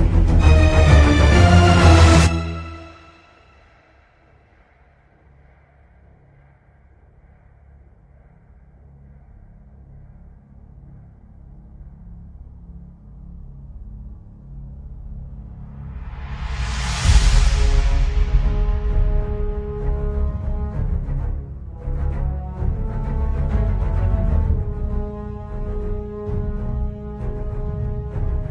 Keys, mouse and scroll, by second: 0.4 scroll down 2, 1.1 scroll down 2, 1.5 shift+a, 7.9 click, 7.9 middle click, 7.9-8.4 scroll up 7, 8.7 click, 10.3 shift+middle click, 11.1 scroll down 1, 11.7 middle click, 11.7 scroll down 1, 12.2 click, 13.0-14.0 scroll down 5, 17.8 scroll down 3, 18.7 scroll up 6, 19.0 shift+middle click, 19.1 scroll down 1, 19.2 middle click, 19.9 ctrl+s, 19.9 middle click, 20.3 scroll up 3, 20.9 scroll down 4, 21.2 shift+middle click, 22.5 scroll down 1, 22.6 middle click, 23.0-23.3 scroll up 4, 23.6 shift+a, 25.4 scroll down 1, 25.7 click, 26.0 shift+d, 26.3 click, 26.5 shift+d, 27.1 scroll up 4, 27.6 middle click, 28.1 click.